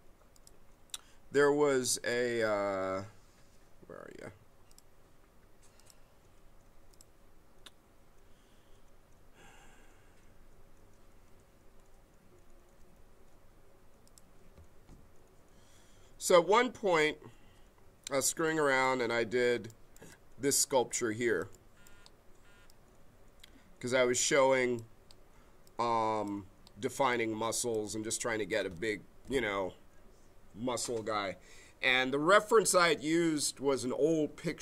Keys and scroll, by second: 12.8 a.